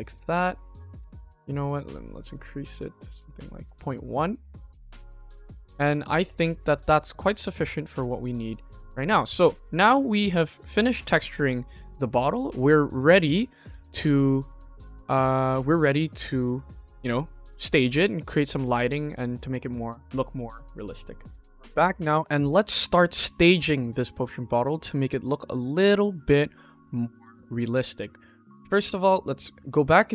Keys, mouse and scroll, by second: 1.6-3.5 drag, 4.1-4.5 middle drag, 5.2-5.7 scroll down 5, 5.7-6.1 middle drag, 6.3 click, 6.6 ctrl+s, 6.8-7.3 scroll up 3, 7.3 middle click, 9.5 KP_1, 10.0 shift+middle click, 21.8 middle click, 22.7-23.1 scroll down 2, 23.1-23.7 scroll up 2, 24.9 click, 26.6-27.4 middle drag, 27.6 middle click, 28.7 ctrl+s, 29.2 click.